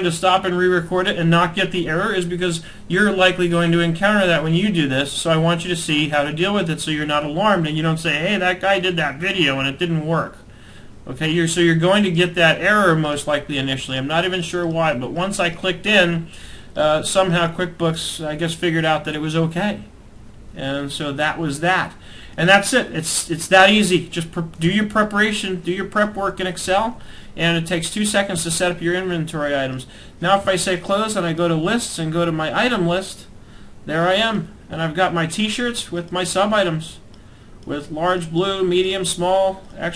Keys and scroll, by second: 24.2 alt+Tab.